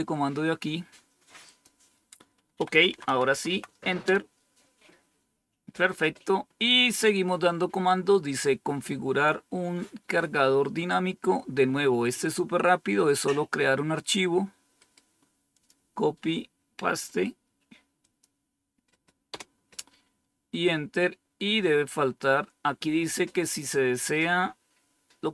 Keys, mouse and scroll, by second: 1.4 click, 2.5 Right, 2.6 Right, 2.8 Right, 3.0 Right, 3.2 Right, 3.4 Right, 3.9 Return, 6.1-9.0 scroll down 2, 12.0-14.0 drag, 14.8 right click, 15.5 click, 17.9 click, 19.2 Return, 21.0-22.0 scroll down 3, 22.0-24.5 scroll down 2.